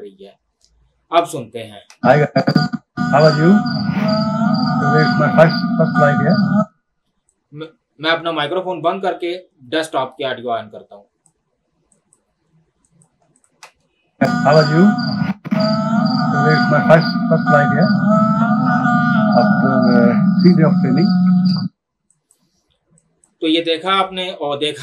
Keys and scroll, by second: 1.9 space, 6.7 space, 13.6 space, 21.6 space.